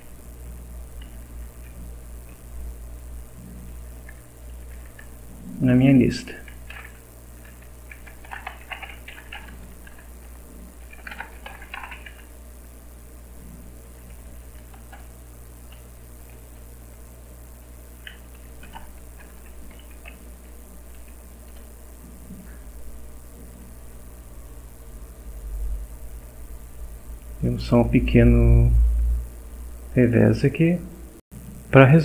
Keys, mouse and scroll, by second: 1.0 End, 1.2 Left, 3.1 shift+Left, 5.0 Right, 6.4-12.6 typing, 15.7 shift+;, 17.5-19.4 typing, 19.9 shift+End, 20.4 Down, 21.5 F5, 23.6 click, 25.4 click, 28.8 click, 29.5 click, 30.5 click, 31.2 click.